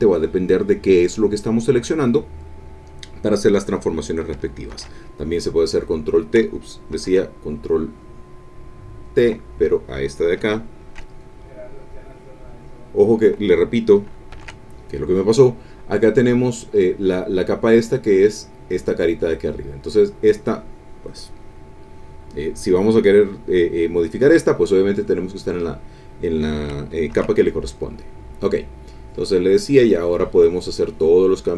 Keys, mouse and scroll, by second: 4.7 ctrl+t, 5.7 click, 6.9 ctrl+t, 8.9 click, 11.1 ctrl+click, 11.9 click, 14.3 ctrl+z, 15.9 click, 18.2 click, 19.8 click, 24.9 click, 27.1 ctrl+t, 27.7 ctrl+click, 28.9-31.5 drag.